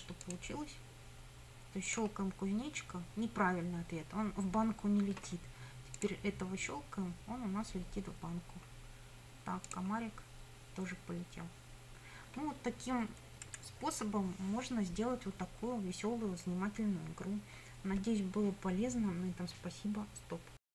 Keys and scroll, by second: 13.5 Escape.